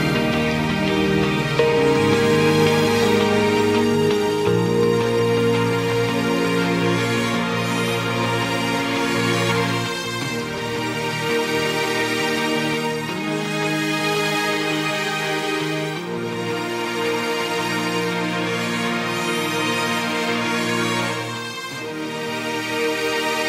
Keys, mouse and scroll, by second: 1.0 click, 1.4 a, 2.2 click, 2.7 a, 3.3 click, 3.7 a, 4.6 click, 5.0 a, 5.5-5.8 scroll up 2, 5.8-7.8 scroll down 1, 9.5 ctrl+r, 12.7 s, 16.9 3, 17.1-17.5 scroll up 1, 17.5 click, 18.6 ctrl+KP_Add, 18.8 ctrl+KP_Add, 19.9 shift+click, 21.4 shift+click, 21.9-22.2 shift+scroll down 1, 22.2-23.4 middle drag.